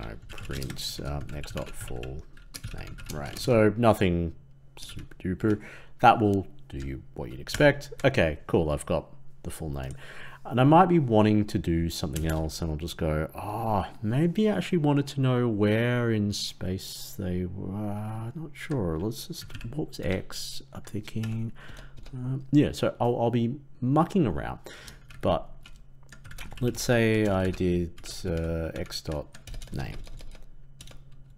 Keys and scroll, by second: 7.4 ctrl+Return, 26.2 ctrl+c, 27.3 ctrl+v, 28.6 ctrl+Left.